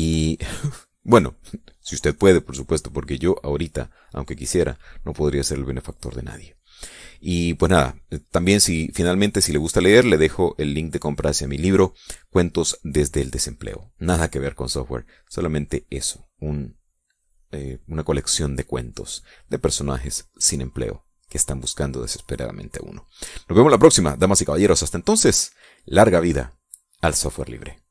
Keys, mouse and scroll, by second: 19.7 click, 20.5 click, 21.1 click, 24.0 click, 24.5-25.9 drag.